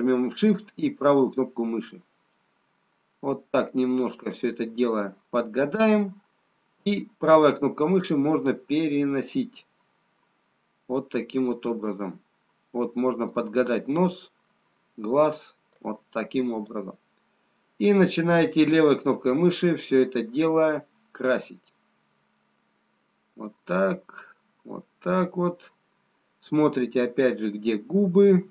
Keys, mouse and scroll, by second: 2.0 shift+right click, 18.0 click.